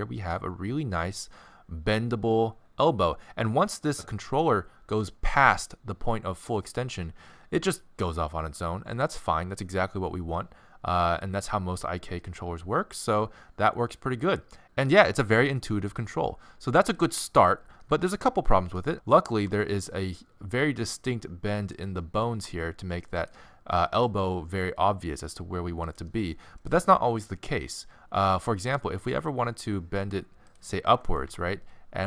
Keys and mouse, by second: 17.8-19.3 middle drag, 19.3 g, 22.0 middle click, 22.3 g, 23.9 g, 28.6 g, 31.2 g.